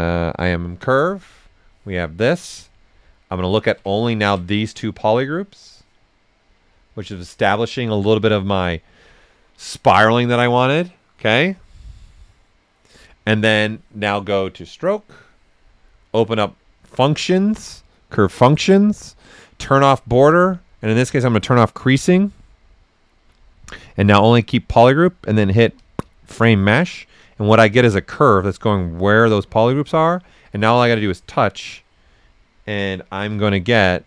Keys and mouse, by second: 0.3 click, 0.3 typing, 2.1 ctrl+right click, 3.4 ctrl+shift+click, 4.4 ctrl+right click, 4.4-7.8 right drag, 7.6-8.3 typing, 14.5 click, 19.8 click, 22.6-23.4 typing, 25.7 click, 25.7 typing, 27.0 right click, 31.0 click, 33.2 s, 33.3-34.0 drag.